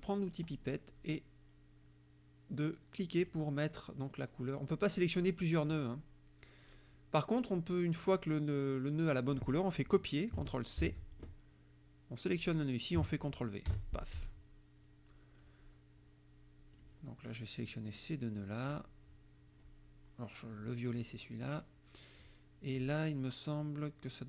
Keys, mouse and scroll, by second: 0.5 click, 3.2 click, 8.1 click, 10.8 ctrl+c, 12.4 click, 13.7 ctrl+v, 16.8 click, 17.7-18.9 drag, 21.0 click, 22.2 click.